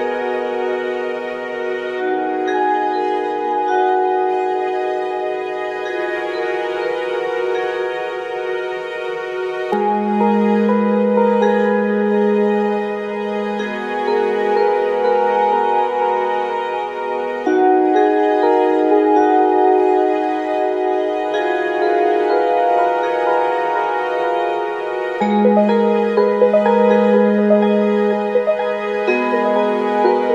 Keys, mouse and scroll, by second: 1.2 click, 2.2-3.3 drag, 3.5 f, 4.1 g, 4.5 f, 5.1-7.1 drag, 7.1 middle click, 7.5 f, 7.6 click, 13.9-21.4 drag, 13.9-21.4 right drag, 25.5 right click, 29.8 k, 30.2 f.